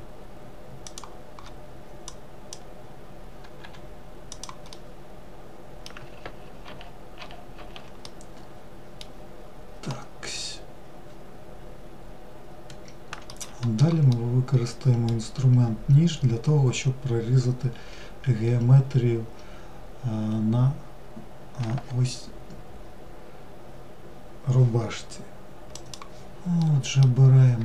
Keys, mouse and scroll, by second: 1.7 click, 4.3-5.8 middle drag, 5.8 ctrl+z, 6.2 ctrl+z, 7.6-9.0 middle drag, 9.0-9.5 scroll down 1, 9.5-12.6 middle drag, 13.7-16.7 middle drag, 26.2-27.2 middle drag, 27.2-27.6 scroll up 2.